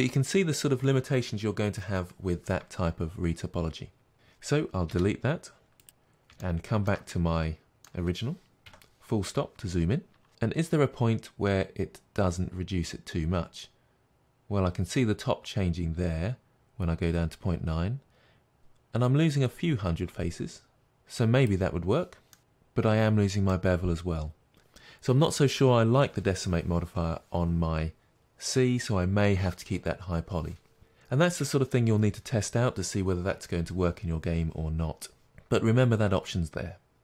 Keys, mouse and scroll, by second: 4.1 Tab, 4.9 Delete, 5.8 click, 6.4 shift+middle click, 7.0-10.3 middle drag, 8.6 KP_Decimal, 10.3-22.3 drag, 22.3-23.6 middle drag, 24.6 Tab, 31.7-37.0 middle drag.